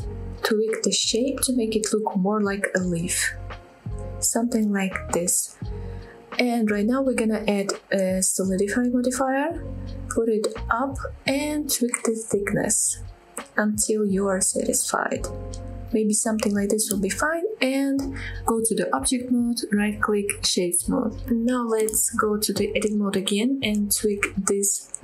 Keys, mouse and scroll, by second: 0.4 click, 0.9 click, 1.2 s, 2.4 click, 2.7 s, 3.7 click, 3.9-4.8 scroll down 2, 5.0 middle click, 5.6-6.0 scroll up 3, 6.0 shift+middle click, 7.0-9.6 drag, 10.3-10.7 drag, 11.5-16.1 drag, 17.1 middle click, 18.6 middle click, 19.3 middle click, 19.7 Tab, 20.1-20.7 right drag, 20.9-21.3 middle drag, 21.4 scroll up 1, 21.5 middle click, 21.9 Tab, 22.2 middle click, 23.7 KP_7, 24.2 click, 24.9 g.